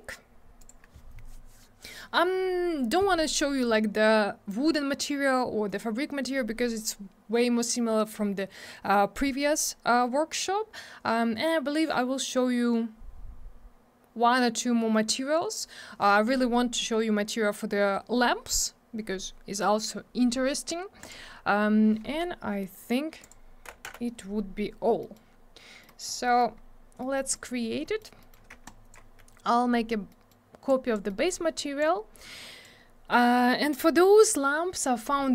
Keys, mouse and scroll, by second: 4.1 scroll down 1, 21.5 scroll down 1, 23.2 click, 23.9 m, 25.0 middle click, 25.2 middle click, 25.8 scroll down 1, 26.3 middle click, 26.4 middle click, 26.6-27.0 scroll up 1, 27.0 middle click, 27.2 middle click, 27.3 middle click, 27.5 middle click, 27.7 scroll down 1, 27.9 middle click, 28.0 middle click, 28.2 middle click, 28.3 middle click, 28.7 shift+click, 30.1 middle click, 30.7 click, 31.1 middle click, 31.3 middle click, 31.8 click.